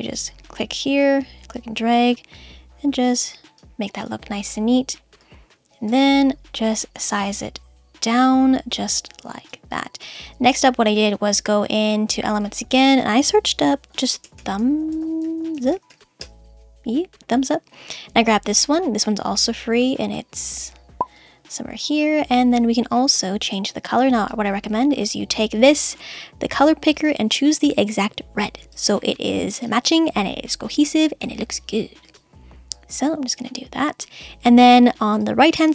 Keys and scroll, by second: 15.5 space, 16.2 Return.